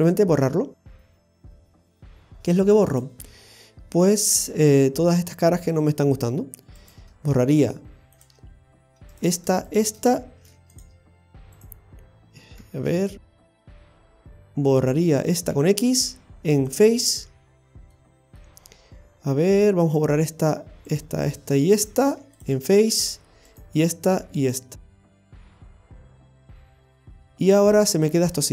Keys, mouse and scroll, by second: 1.0 shift+middle click, 1.6 middle click, 2.9 click, 3.4-4.0 scroll up 3, 6.8 right click, 8.2 click, 9.1 right click, 9.7 shift+right click, 10.4 x, 11.6 right click, 12.9 ctrl+z, 14.0 ctrl+z, 15.5 x, 17.6 scroll down 2, 17.9 middle click, 19.8 right click, 20.9 shift+right click, 21.3 right click, 22.0 shift+right click, 22.1 x, 23.5 right click, 24.4 shift+right click, 25.2 right click, 25.8 shift+right click, 26.1 x, 26.7 middle click, 28.3-28.5 scroll up 1, 28.3 x.